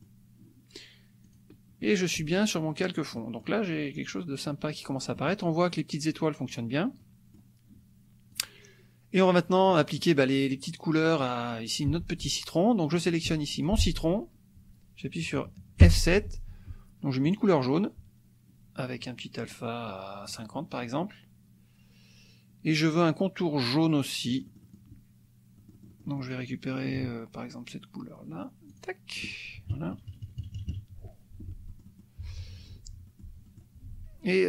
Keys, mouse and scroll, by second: 1.2 click, 2.7 click, 3.1 click, 5.2 click, 7.0 click, 8.3 click, 9.7 click, 12.9 click, 13.3 F2, 13.5 click, 15.8 F7, 17.3 click, 19.4 right click, 20.3 click, 24.3 click, 25.7 click, 28.6 shift+click, 29.7 KP_Subtract, 31.6 F1, 31.8 click, 32.7 F2, 33.1 click, 33.6 click.